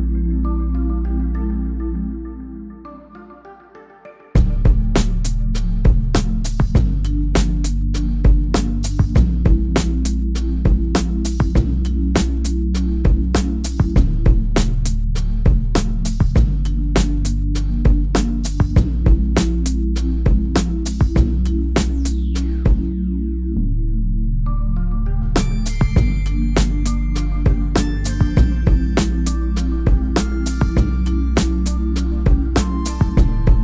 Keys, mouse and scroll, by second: 0.6 ctrl+a, 1.1-3.1 typing, 4.3 click, 5.2 Right, 5.5 click, 6.8 Right, 7.3 click, 12.9 click, 15.7-16.7 typing, 17.2 click, 19.1-21.2 typing, 23.0 click, 25.1 click, 26.0 space, 33.3 click.